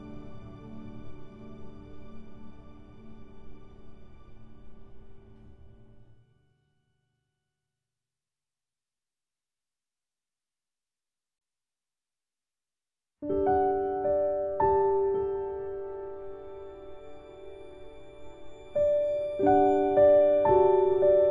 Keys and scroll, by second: 15.2 ctrl+z, 20.8 ctrl+End.